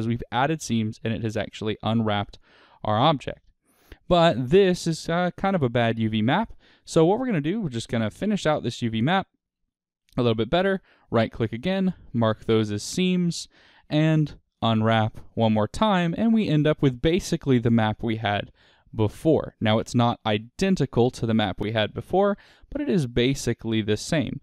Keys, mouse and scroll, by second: 3.3 click, 4.2-5.6 scroll down 1, 5.6-7.9 shift+middle drag, 7.9 shift+click, 8.6 shift+click, 9.2 shift+click, 9.6 middle click, 10.3-12.2 right drag, 12.2-13.7 middle drag, 13.7 a, 14.5 u, 24.1 click.